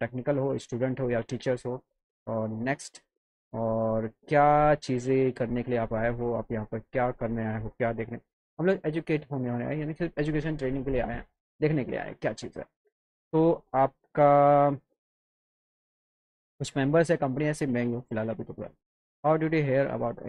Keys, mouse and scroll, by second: 1.2 click, 2.5 click, 8.3 click, 12.0 click, 17.7 click, 18.8 click.